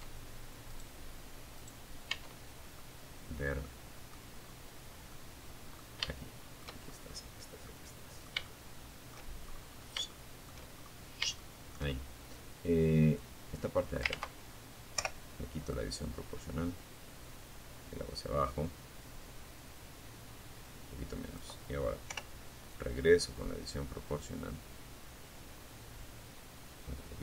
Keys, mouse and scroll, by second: 0.3 Tab, 1.0-2.5 middle drag, 2.6-3.0 scroll down 2, 3.3 middle click, 4.2 shift+middle click, 5.0-5.6 shift+scroll up 1, 5.8 middle click, 6.3-6.6 scroll up 1, 6.6 shift+middle click, 7.6-8.3 shift+scroll up 1, 8.3 shift+middle click, 8.9-9.4 shift+scroll up 3, 9.6 shift+middle click, 11.4-12.4 drag, 12.4 ctrl+z, 13.1 o, 13.9-19.8 drag, 20.2 o, 20.9 click, 21.6-22.4 scroll up 2, 23.0 scroll down 1, 24.2 scroll down 1.